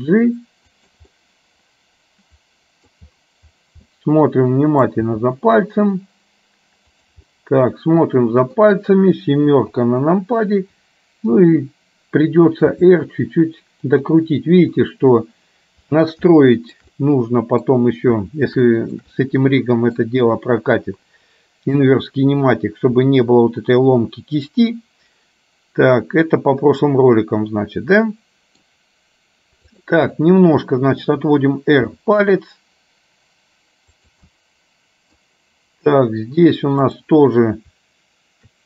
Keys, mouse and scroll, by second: 1.2-3.0 middle drag, 4.0-5.1 middle drag, 5.1 g, 7.3-8.7 middle drag, 9.8 KP_7, 12.8 r, 16.5 shift+middle click, 17.0 middle click, 18.8 shift+middle click, 19.2 middle click, 23.2-28.8 middle drag, 30.2-31.2 middle drag, 31.8 r, 34.5 middle click, 37.0 click.